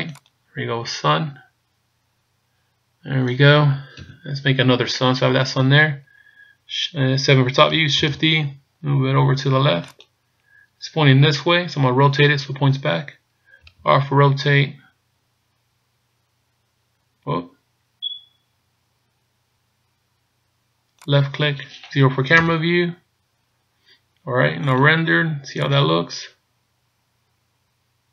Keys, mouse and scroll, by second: 1.8 click, 3.9 KP_7, 8.1 ctrl+shift+super+d, 14.1 r, 22.4 KP_0, 24.7 click.